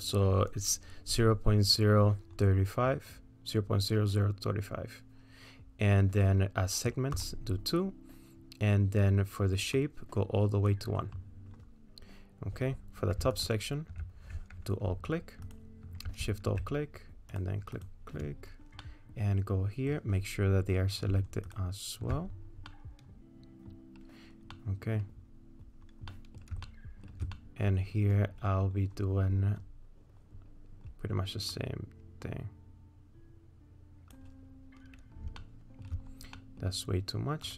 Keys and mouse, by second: 7.2 click, 9.8 click, 13.4 alt+click, 17.8 shift+click, 18.9-19.9 middle drag, 22.7-23.7 middle drag, 24.6 middle click, 26.2 middle click, 26.7 shift+middle click, 27.4 middle click, 31.5-34.2 drag, 35.4 shift+middle click, 36.4 middle click.